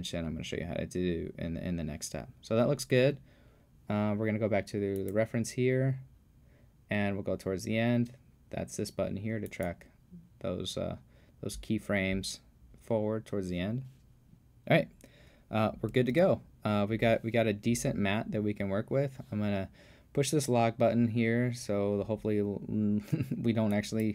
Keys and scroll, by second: 16.1 super+s.